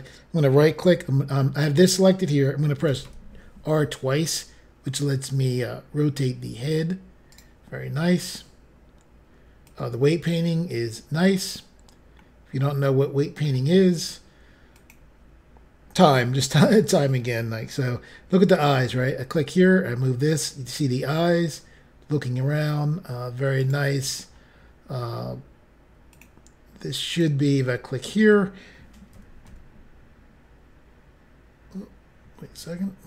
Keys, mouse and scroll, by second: 2.8 typing, 7.3 right click, 7.7 scroll up 3, 9.6 click, 10.6 scroll up 3, 10.8 scroll down 1, 11.3 scroll up 1, 12.1 middle click, 14.7 click, 18.8 g, 23.6 right click, 24.3 scroll down 1, 26.1 click, 27.1 click, 27.6 middle click, 28.3 scroll up 1, 28.4 scroll down 1, 28.7 scroll up 1, 29.2-29.5 typing, 32.5 x.